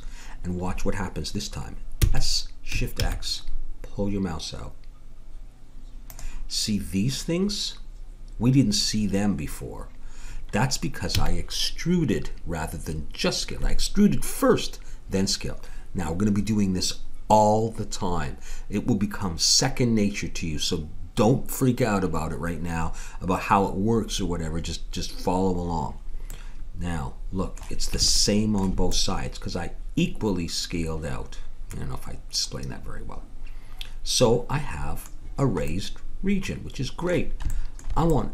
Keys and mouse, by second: 2.0 s, 11.1 a, 26.3-30.2 middle drag, 35.6-38.2 middle drag.